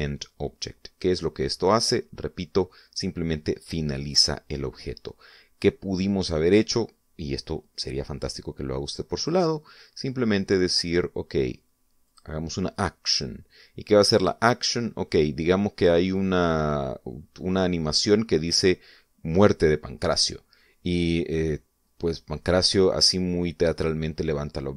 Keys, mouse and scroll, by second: 10.4 click, 13.3 click, 15.4 click, 19.7 click, 23.2 scroll down 1.